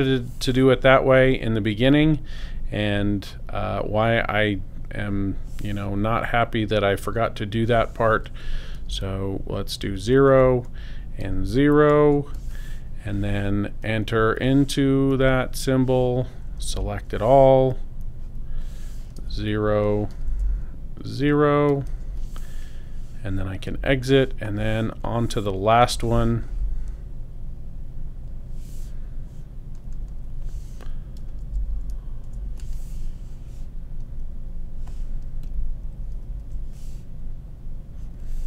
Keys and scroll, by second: 8.8 0, 10.3 shift+Tab, 11.2 shift+0, 11.7 0, 12.0 Return, 16.7 super+a, 19.2 BackSpace, 20.1 0, 20.3 Tab, 21.7 0, 21.9 Return, 31.2 0, 31.4 Tab, 31.5 0, 32.2 Return, 36.2 super+a.